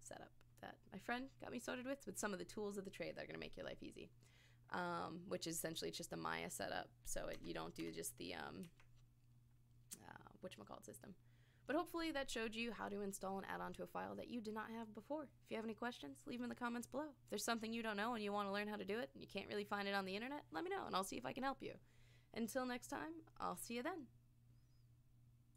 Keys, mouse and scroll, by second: 7.3 Tab, 7.8 Tab, 8.6 Tab.